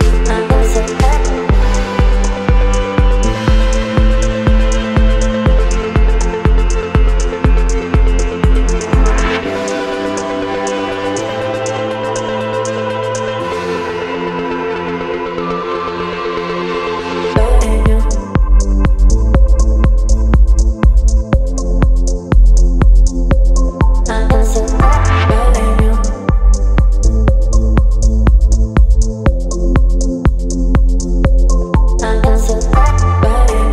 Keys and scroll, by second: 0.2 Delete, 0.9 space, 5.7 v, 12.6 Delete, 13.4 space, 17.7 Delete, 18.2 space, 21.6 Delete, 22.4 space, 25.8 Delete, 32.9 space.